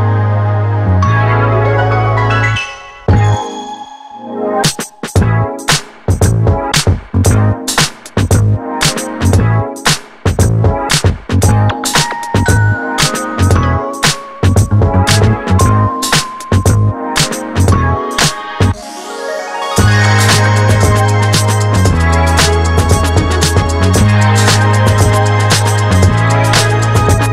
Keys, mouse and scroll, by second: 1.9 click, 4.7 click, 10.8 click, 10.8 click, 22.4-27.3 drag.